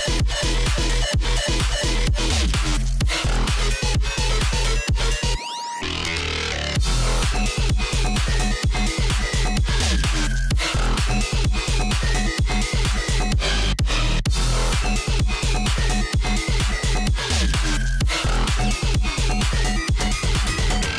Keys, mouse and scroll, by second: 4.5-5.2 alt+scroll up 1, 5.6-7.7 drag, 7.7 ctrl+shift+], 8.3-12.0 drag, 13.0-13.4 alt+scroll up 1, 13.4 click, 14.1 Up, 14.3 Left, 15.0 Down, 15.3 Up, 15.8 click, 16.1 alt+scroll down 1, 16.5 space, 16.6 click, 16.7 space, 17.3 click, 17.5 space, 18.0 click, 18.1 right click, 18.7-20.9 drag.